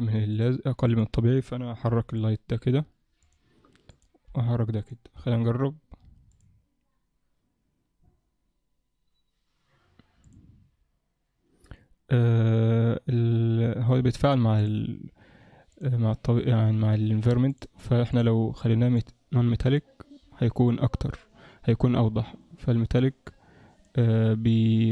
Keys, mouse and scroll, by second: 0.4 click, 0.9 click, 2.0 g, 3.9 click, 4.3 g, 5.2 KP_0, 6.6 click, 10.4 click, 14.6 click, 15.7 click, 19.0 click, 23.2 click, 24.6 click.